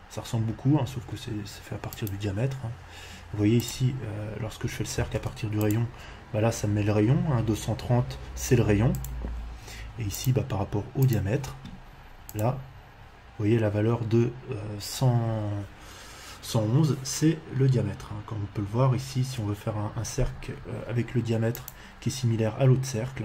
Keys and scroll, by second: 4.9 c, 5.1 space, 20.1 Escape.